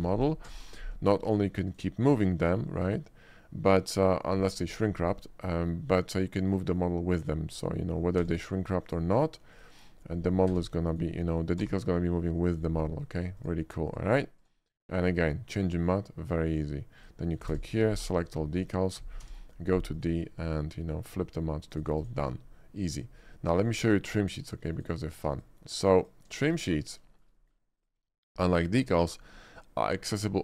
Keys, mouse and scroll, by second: 0.0 shift+click, 0.5 d, 1.3 click, 1.7 click, 2.6-4.3 middle drag, 5.5 middle drag, 6.0 shift+middle click, 7.4 shift+middle click, 7.9 shift+middle click, 8.2 d, 8.9 click, 9.6 click, 10.5 s, 10.9 right click, 11.6 r, 12.6 right click, 13.4 click, 13.9 click, 14.5 click, 15.6-16.6 middle drag, 17.1 click, 17.6 d, 18.2 click, 18.6 middle drag, 20.0 click, 21.1 scroll down 1, 21.8 click, 22.1 click, 24.0 click, 24.7 click, 24.8 click, 25.3 x, 25.4 click, 26.0 click, 26.6 click, 27.2 shift+middle click, 27.4 shift+middle click, 27.9 shift+click, 28.2 shift+middle click, 29.0 shift+middle drag.